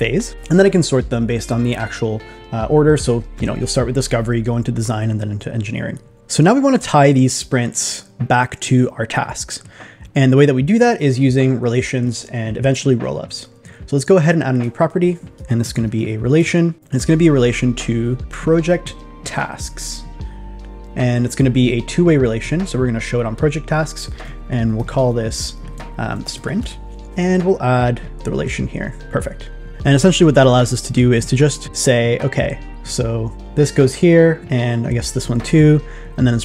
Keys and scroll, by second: 24.7 shift+p, 25.7 super+a, 26.2 shift+s.